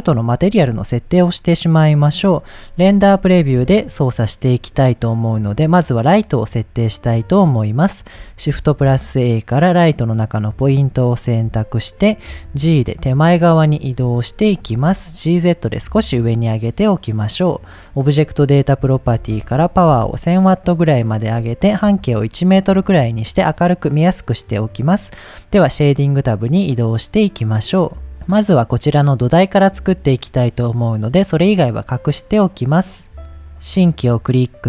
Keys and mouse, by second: 3.4 click, 7.1-7.6 middle drag, 8.5 shift+a, 11.5 KP_7, 12.3 g, 13.4 click, 13.9-14.3 middle drag, 14.6 g, 14.7 z, 15.5 click, 15.8-16.4 middle drag, 17.2 click, 17.9-20.8 drag, 19.3 KP_0, 21.1-22.7 drag, 23.3-23.8 middle drag, 27.8 click, 28.7 click, 31.2 click, 32.3 click, 32.7 click, 33.3 click, 33.5-34.2 drag.